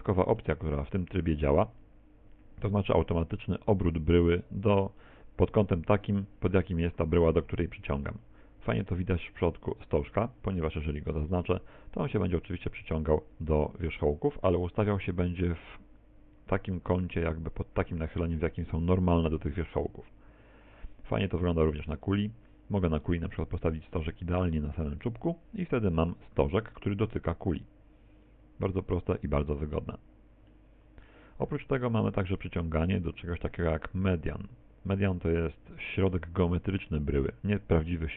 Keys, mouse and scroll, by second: 7.8 click, 9.8 right click, 11.0 g, 25.2 ctrl+click, 25.6-26.8 scroll up 8, 26.3 middle click, 29.5-30.0 scroll down 1, 30.6 middle click, 30.6-31.7 scroll down 6, 32.5 click.